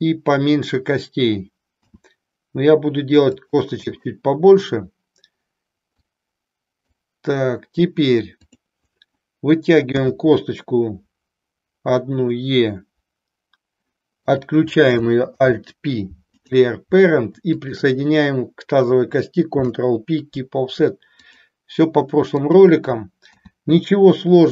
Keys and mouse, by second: 5.8-7.1 drag, 8.3 click, 14.2 click, 15.3 alt+p, 17.4 shift+click, 19.6 ctrl+p, 22.4 click, 23.3 e.